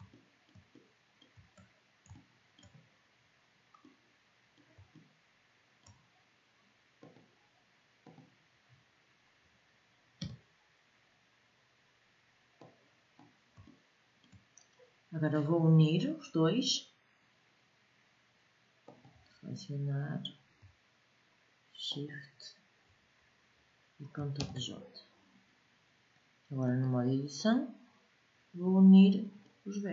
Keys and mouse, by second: 6.5 middle click, 8.0 click, 9.8 n, 12.3 middle click, 12.4 click, 12.5 middle click, 12.7 middle click, 12.9 click, 13.4-14.5 middle drag, 24.0 ctrl+j, 28.4-29.9 middle drag.